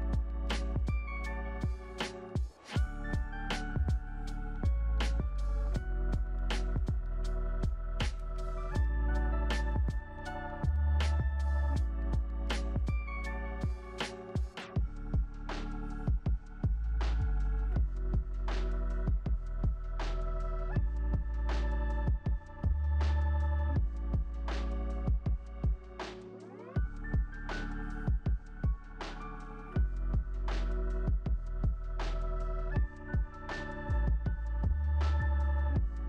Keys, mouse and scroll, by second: 0.6-4.0 typing, 4.2 Return, 5.3 2, 35.1-35.7 scroll up 5, 35.7-36.0 scroll up 5.